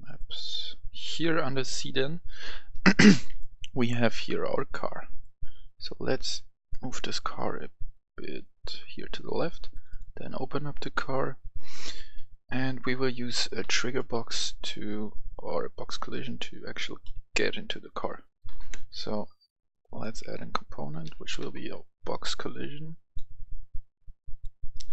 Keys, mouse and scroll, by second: 0.4 click, 4.9 right click, 6.2-9.2 drag, 13.5 right click, 14.1-14.5 scroll down 1, 14.5-16.2 right drag, 16.3 click, 16.9 right click, 17.2-19.7 typing, 19.8 click, 21.0-21.3 typing, 22.9-24.9 drag.